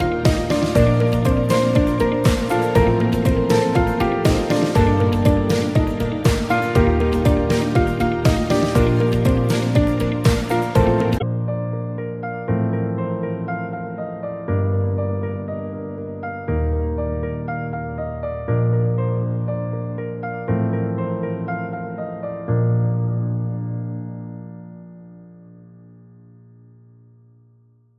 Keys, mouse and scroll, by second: 13.9-14.3 ctrl+scroll up 2, 15.3-16.1 scroll down 1, 20.9 right click.